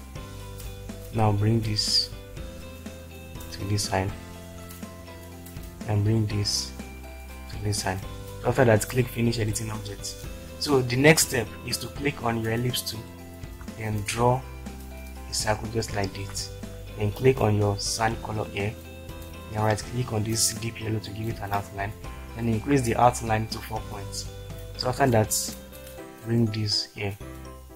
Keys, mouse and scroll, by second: 4.7 Tab, 9.8 drag.